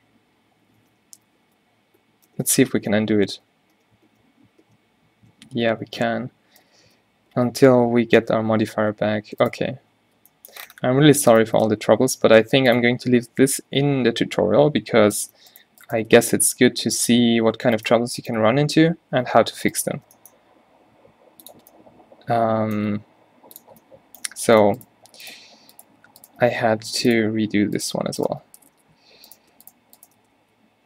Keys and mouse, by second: 2.6 ctrl+z, 2.8-3.3 ctrl+z, 3.5 ctrl+z, 3.7 ctrl+z, 4.1 ctrl+z, 4.3 ctrl+z, 4.9 ctrl+z, 6.0 Tab, 6.6 Tab, 7.2 ctrl+z, 7.6 ctrl+z, 8.9 Tab, 9.3 Tab, 9.6-10.1 drag, 10.0 Tab, 11.8 g, 16.2 x, 19.3 v, 20.1 g, 23.3 g, 27.4 x, 28.8 f, 29.0 f, 30.3 g.